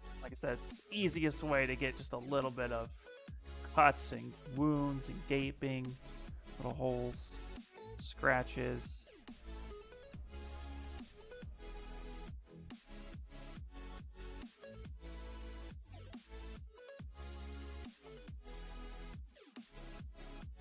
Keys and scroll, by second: 0.0 space, 1.5 s, 5.3 1, 8.5 s, 10.8 ctrl+z, 11.2 ctrl+z, 12.0 ctrl+z, 12.4 ctrl+z, 13.0 ctrl+z, 13.5 ctrl+z, 14.0 ctrl+z, 14.4 ctrl+z, 15.4 ctrl+z, 16.8 s.